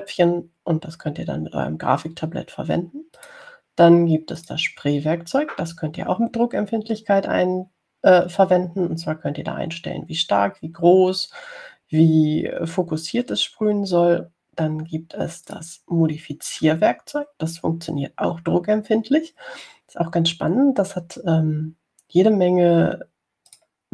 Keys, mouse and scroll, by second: 4.4 click, 5.6 click, 16.7 click.